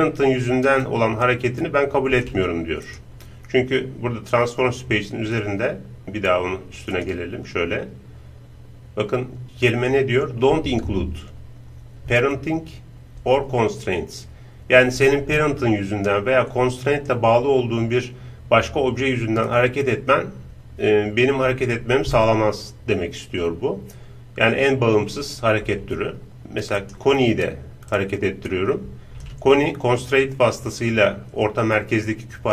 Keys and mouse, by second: 0.6 right click, 0.9-2.5 drag, 2.9-4.6 right drag, 6.0-11.9 drag, 26.8-29.2 right drag, 28.0-29.6 drag.